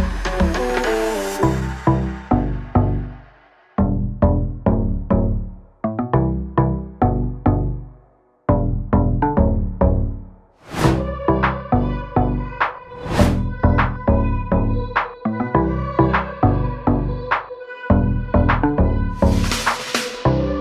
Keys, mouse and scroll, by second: 0.0 double click, 1.7 click, 2.8 right click, 4.7 click, 6.7 click, 7.5 click, 8.4 click, 8.5 double click, 11.8 click, 12.7 double click, 13.2 click, 16.0 click, 16.4 scroll up 1, 16.7 scroll down 1, 16.8 ctrl+o, 17.7 click, 18.1 click, 19.4 click.